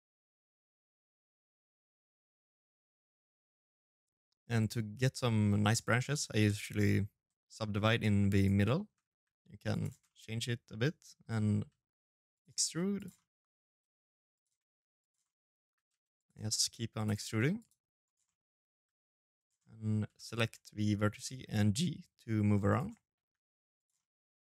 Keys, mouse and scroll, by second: 6.8 middle click, 6.8 right click, 6.8-8.6 typing, 7.1 right click, 7.4 middle click, 8.8 middle click, 10.3 e, 11.3 ctrl+a, 11.9 middle click, 12.4 e, 13.4 ctrl+a, 14.0 middle click, 14.4 g, 15.2 e, 16.0 ctrl+a, 16.8 right click, 17.0 middle click, 17.5 g, 18.4 middle click, 18.9 shift+z, 19.3 middle click, 19.9 shift+z, 20.1 g, 21.7 middle click, 21.9 g, 22.7 middle click, 23.7-24.4 scroll down 8, 24.3 middle click.